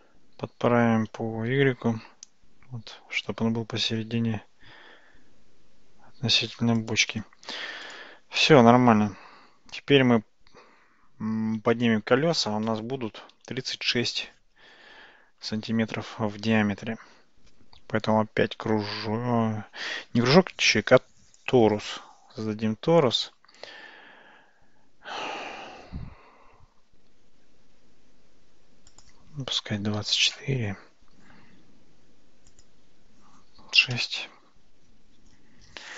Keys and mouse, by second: 0.4 g, 7.9 click, 8.4-11.8 middle drag, 15.8 shift+a, 28.9-31.5 drag, 32.5-35.9 drag.